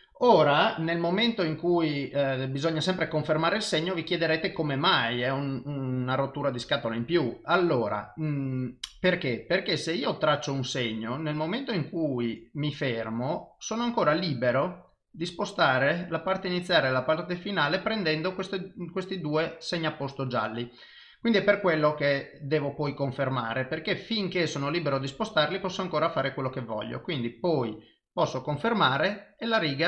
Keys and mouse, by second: 8.9 click.